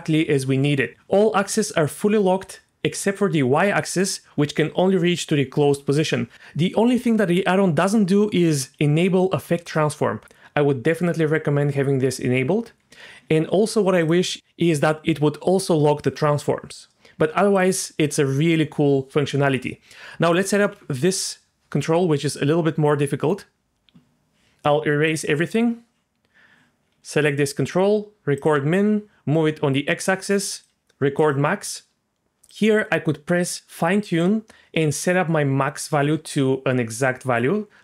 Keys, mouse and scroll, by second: 0.9 g, 1.3 g, 1.9-3.8 drag, 3.8 g, 4.3 g, 6.0 click, 9.7 click, 14.0 click, 17.5-20.3 drag, 20.7 g, 25.1 click, 26.9 g, 27.4 right click, 28.4 click, 29.0-30.6 drag, 31.2 click, 32.5 click, 34.2-37.8 drag.